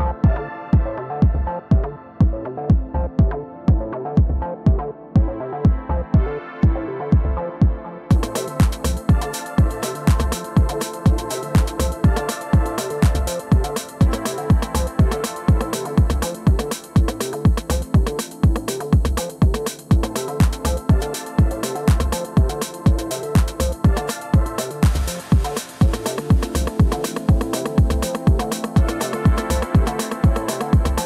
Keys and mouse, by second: 0.1 alt+click, 0.5 click, 1.5 alt+click, 1.7 alt+middle click, 1.8 alt+click, 2.0 alt+click, 2.6 click, 2.9 alt+click, 3.4 alt+click, 4.1 alt+middle click, 4.5 2, 5.2 click, 5.5 alt+click, 5.7 click, 6.0 shift+click, 6.2 shift+click, 6.4 shift+click, 6.6 r, 6.8 alt+click, 7.0 click, 7.7-9.2 drag, 9.3 alt+click, 9.6 alt+click, 10.0 ctrl+z, 10.2 click, 10.5 click, 10.8 alt+4, 10.9 click, 11.2 F2, 11.8 alt+middle click, 12.2 alt+middle click, 12.5 F3, 12.9 alt+middle click, 13.2 w, 13.4 click, 14.4-15.2 alt+drag, 15.4 click, 15.6 click, 15.9-16.2 alt+drag, 16.6-17.0 alt+drag, 17.1 alt+click, 17.5 F1, 18.5 r, 18.8 click, 19.6 click, 20.0 w, 20.2 click, 20.5-20.9 alt+drag, 20.9 r, 21.1 click, 21.4 click, 21.6 alt+click, 22.1-23.3 drag, 23.4 alt+click, 23.8 4, 23.9 click, 24.0 middle click, 24.3 middle click, 26.0-27.0 alt+drag, 27.2 alt+middle drag, 28.0 alt+click, 28.5 alt+middle click.